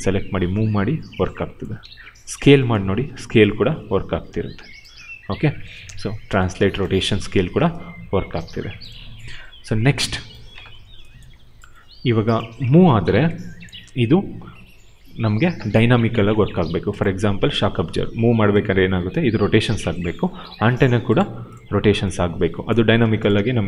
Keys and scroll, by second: 1.7 ctrl+z, 2.9 r, 4.9 ctrl+z, 5.7 w, 6.7 ctrl+z, 7.1 e, 8.4 ctrl+z, 12.4 w, 13.7 ctrl+z, 17.2 e, 19.9 ctrl+z, 21.7 e, 22.6 ctrl+z, 22.9 q.